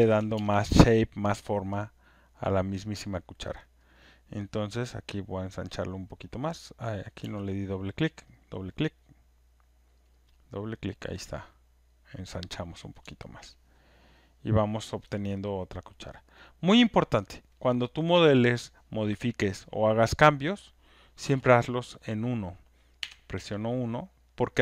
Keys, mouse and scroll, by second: 0.3 ctrl+z, 2.8 click, 3.9 click, 4.1 click, 6.4 click, 8.2 click, 8.4 click, 10.0 click, 10.0 z, 10.1 click, 11.9 click, 13.3 alt+right click, 15.0 alt+click, 15.2 alt+click, 16.1 right click, 16.4 click, 17.1 alt+right click, 17.4 alt+middle click, 18.0 click, 18.3 alt+right click, 19.0 alt+click, 21.4 alt+scroll, 22.1 click, 22.1 1, 23.0 1, 23.7 alt+middle click, 24.2 alt+click, 24.5 alt+scroll, 24.5 alt+right click, 24.5 1.